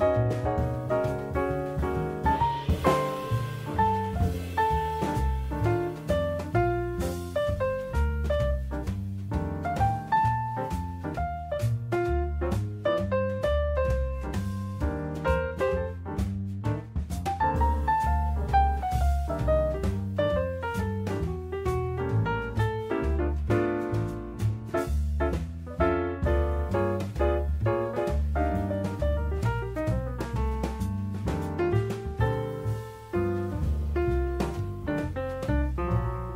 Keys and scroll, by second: 1.1 Escape, 4.8 Escape, 23.0 Escape.